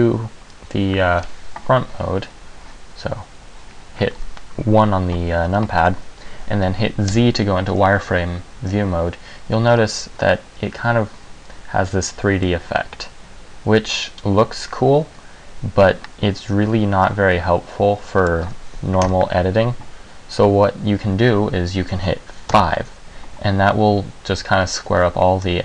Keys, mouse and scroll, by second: 7.3 z, 9.9-11.5 scroll up 3, 12.6 middle click, 19.1 KP_1, 22.6 KP_5, 24.9 middle click.